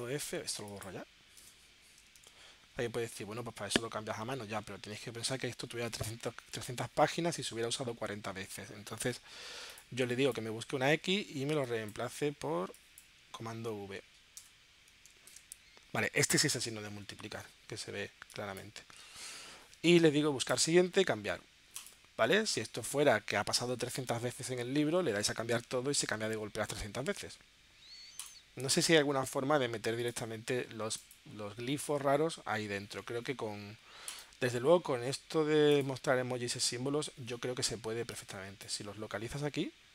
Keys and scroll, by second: 1.4 BackSpace, 2.5 super+f, 10.9 x, 13.5 alt+c, 14.4 BackSpace, 15.8 super+v.